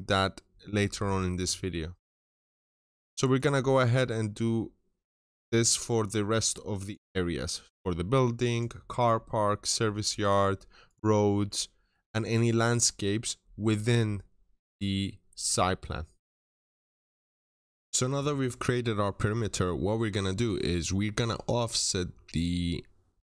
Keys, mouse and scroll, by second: 1.5 scroll down 1, 1.7 middle click, 2.1 scroll up 1, 2.5-3.2 typing, 3.2 click, 3.5-3.8 scroll up 1, 5.2 click, 5.5 middle click, 5.7-6.1 scroll down 1, 6.1 scroll up 1, 6.7 click, 6.9 middle click, 7.1 scroll down 1, 7.4 middle click, 7.8-8.3 scroll up 1, 8.4 click, 9.5 middle click, 9.7 scroll down 1, 10.0 right click, 10.7 click, 10.9 scroll down 1, 11.1 middle click, 11.4 scroll up 1, 11.7 middle click, 16.3 scroll down 1, 16.5 middle click.